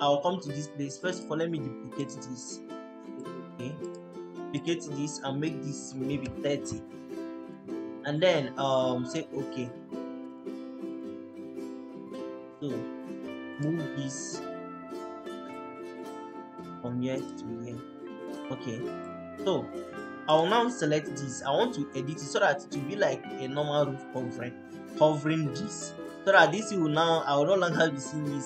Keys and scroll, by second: 5.8-6.7 typing, 19.4 Escape.